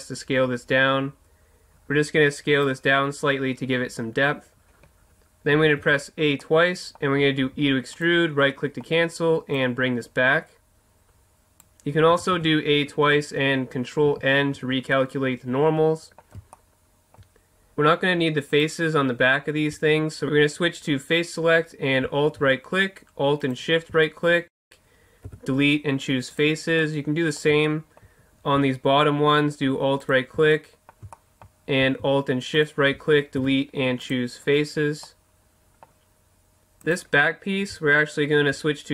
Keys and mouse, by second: 2.6-4.3 drag, 5.5 a, 5.8 a, 7.4 e, 8.0-9.3 right drag, 9.5 click, 9.5-10.6 right drag, 10.6-11.6 drag, 12.1 a, 12.3 a, 14.0 ctrl+n, 14.9-17.0 drag, 17.4-20.3 drag, 20.5-25.2 right drag, 25.2 Delete, 26.8-28.6 middle drag, 30.0 right click, 30.5-32.5 middle drag, 32.5-34.3 right drag, 33.4 Delete, 36.8-38.5 drag.